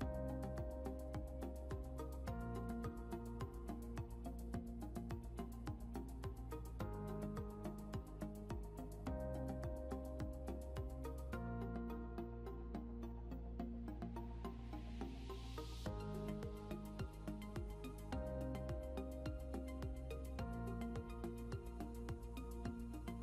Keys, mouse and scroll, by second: 3.0 F9, 5.5 scroll up 1, 10.9 scroll up 1, 16.5 scroll up 1.